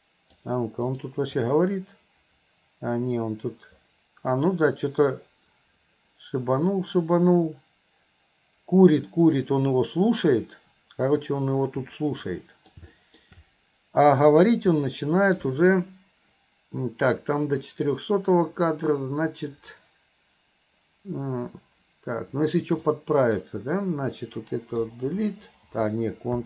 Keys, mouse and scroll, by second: 1.0 click, 1.5-9.6 drag, 12.3-12.8 middle drag, 13.0 middle drag, 14.8 middle click, 22.9-23.5 drag, 24.9 Delete.